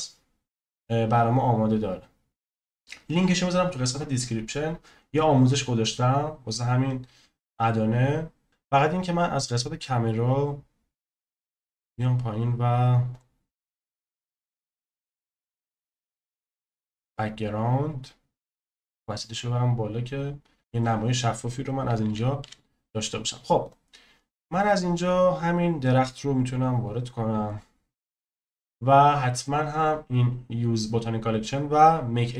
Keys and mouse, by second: 9.2 click, 18.7 click, 22.0 n, 22.4 n, 23.7-32.3 drag.